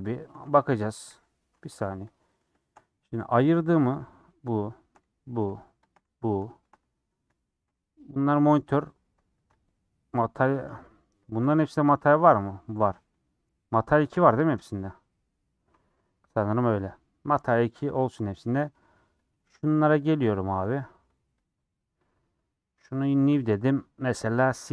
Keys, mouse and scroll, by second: 0.4 Tab, 1.1 /, 1.6 Tab, 1.7 scroll down 3, 2.3 middle click, 2.7 scroll up 3, 3.0 middle click, 3.4 click, 3.5 g, 4.8 shift+click, 5.1 g, 5.9 shift+click, 6.1 g, 6.9 middle click, 7.8 g, 10.6 middle click, 11.5 click, 12.0 click, 12.4 middle click, 12.8 a, 15.6-17.5 drag, 17.5 ctrl+l, 18.1 click, 18.2 middle click, 18.6 scroll up 1, 18.7 middle click, 19.2 click, 19.7 click, 20.4 middle click, 20.5 scroll down 1, 20.8 middle click, 21.4 click, 23.0-24.7 drag.